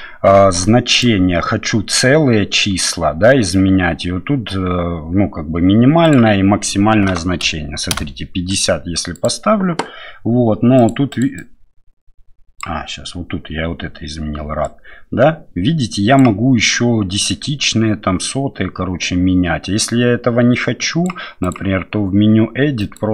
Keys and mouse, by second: 10.8 click, 11.2 click, 11.5-12.7 drag, 14.7-16.2 drag, 17.4-21.1 drag, 21.4-23.1 drag.